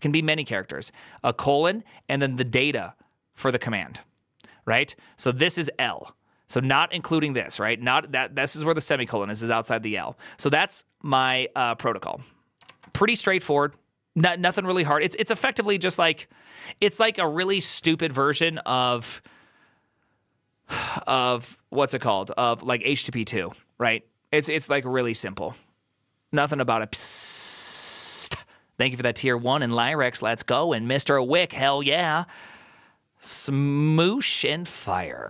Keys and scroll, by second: 12.6 alt++.